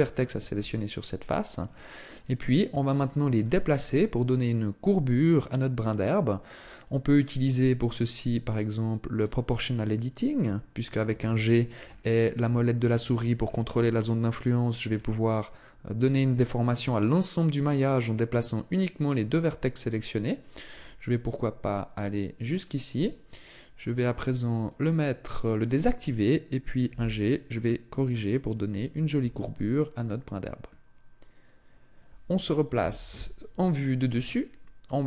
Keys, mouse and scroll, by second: 0.4 KP_3, 1.6-2.3 scroll down 6, 1.8-2.4 scroll up 4, 2.5-3.0 scroll down 1, 3.0 shift+middle click, 3.0 scroll down 1, 7.3 click, 11.0 g, 23.0 click, 24.1 click, 26.8 g, 28.2 click, 29.2 Tab, 29.9 middle click, 32.8 KP_7, 34.3 shift+middle click.